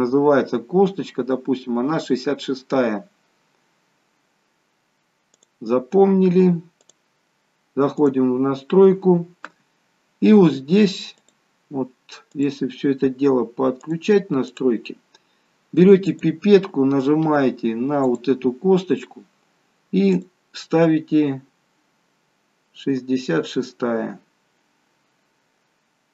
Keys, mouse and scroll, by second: 0.8-2.7 scroll up 2, 5.4 click, 6.9 click, 8.6-11.2 scroll down 2, 11.4 click, 14.0 click, 16.2 click, 20.3 click.